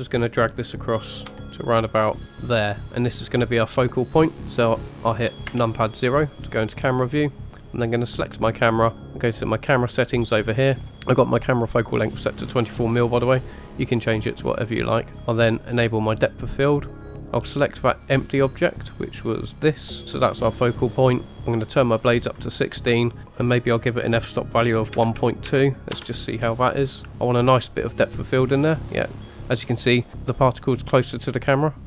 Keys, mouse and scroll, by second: 1.3 g, 5.5 KP_0, 8.1 click, 9.7 click, 15.1-15.7 scroll down 2, 15.7-17.1 drag, 17.3-19.7 drag, 21.3-21.7 scroll down 3, 21.7 click, 23.2-26.0 drag, 27.0 click.